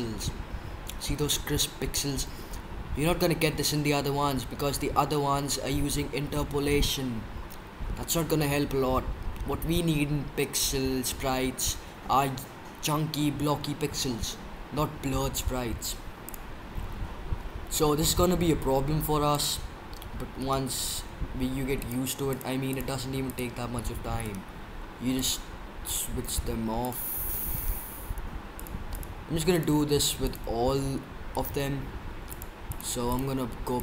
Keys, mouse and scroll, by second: 16.3-18.1 drag, 20.5-21.8 right drag, 21.8-22.1 middle drag, 24.3-25.8 middle drag, 27.6-29.1 middle drag, 29.1 click, 29.1 right click, 32.3-33.0 drag.